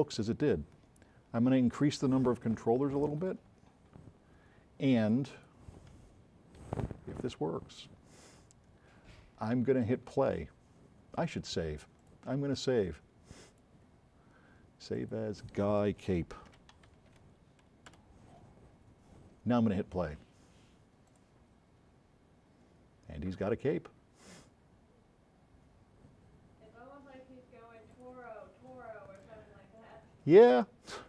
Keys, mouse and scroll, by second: 0.1 a, 3.1 KP_5, 3.5 KP_Enter, 6.7-7.8 right drag, 6.7 s, 15.0 click, 16.4-17.8 typing, 18.1 Return, 28.0 click.